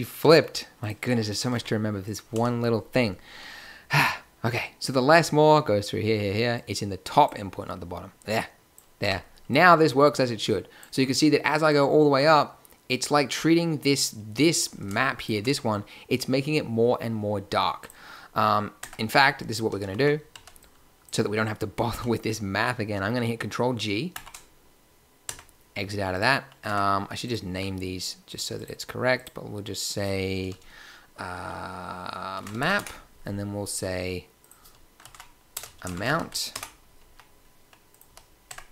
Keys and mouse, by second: 1.5 g, 2.3 a, 6.5 click, 7.3-8.2 drag, 8.3-8.7 drag, 8.9 click, 9.0 Tab, 18.8 Tab, 19.6 a, 19.8 a, 19.9 a, 20.3 b, 24.1 ctrl+g, 25.2 Tab, 26.6 Tab, 27.4 n, 30.8 click, 33.6-36.2 drag, 37.0 b, 37.8 click, 38.0 n, 38.4 Tab.